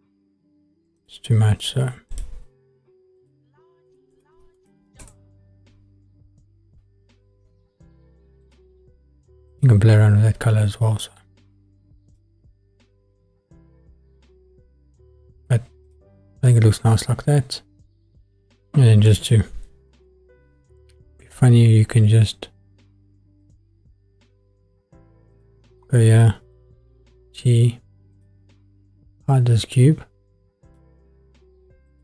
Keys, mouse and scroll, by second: 1.0-2.1 drag, 3.2-5.0 drag, 8.4 click, 12.2-13.2 middle drag, 19.9 shift+a, 25.4-26.0 drag, 26.5 g, 28.1 click, 30.6 click, 31.9 click.